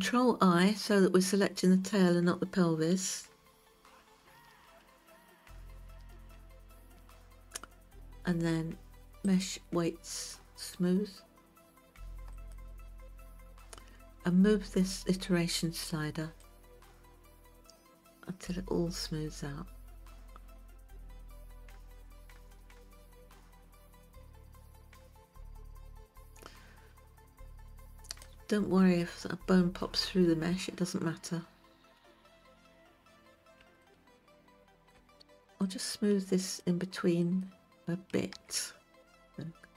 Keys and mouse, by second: 5.8 ctrl+i, 9.9-13.0 drag, 17.1-28.7 drag, 34.3-35.2 shift+middle drag, 35.3 alt+click, 36.2 shift+click, 37.8 shift+click.